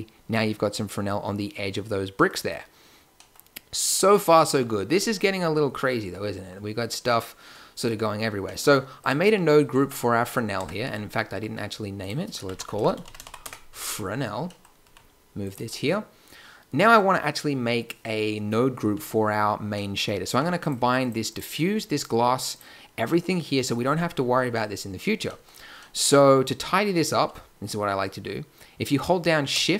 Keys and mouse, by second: 8.9 click, 9.7 Tab, 10.5 Tab, 11.2 n, 13.6 n, 14.8 g, 20.2 g, 20.9-24.4 drag.